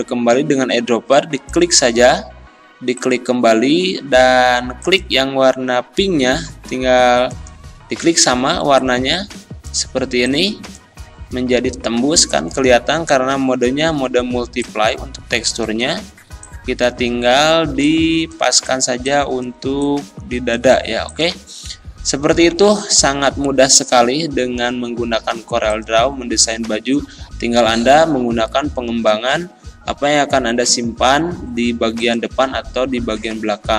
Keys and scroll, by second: 22.4 z.